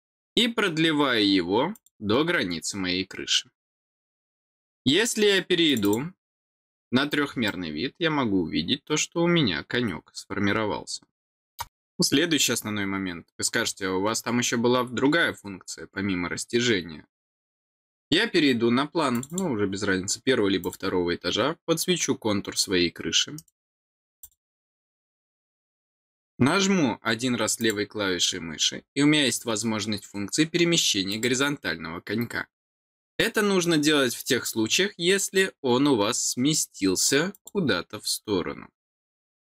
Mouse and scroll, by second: 1.7 click, 5.6 click, 5.8 click, 6.7-7.1 scroll down 4, 7.4-11.5 middle drag, 19.1 click, 20.6 click, 23.3 right click, 24.2 click, 27.6 click, 31.1 click, 37.3 click.